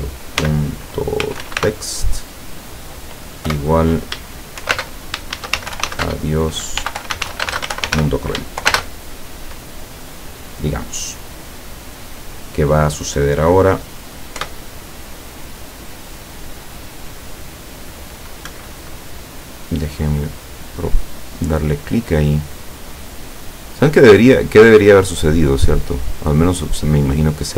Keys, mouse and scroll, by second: 0.0-1.6 typing, 3.5 =, 4.8-8.7 typing, 14.4 p, 18.5 Escape, 19.7 click, 21.9-27.1 drag.